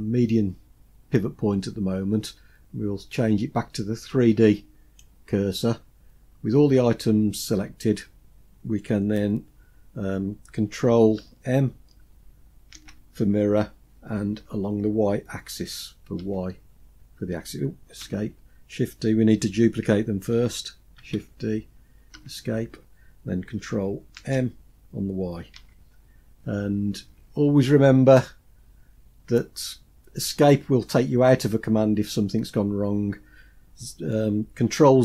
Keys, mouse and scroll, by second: 12.7 ctrl+m, 20.9 shift+d, 24.1 ctrl+m.